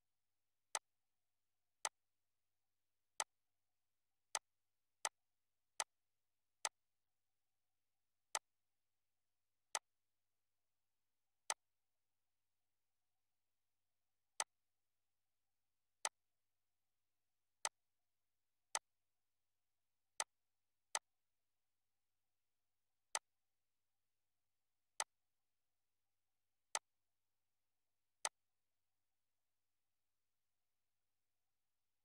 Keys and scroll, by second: 0.0 Up, 29.9 BackSpace.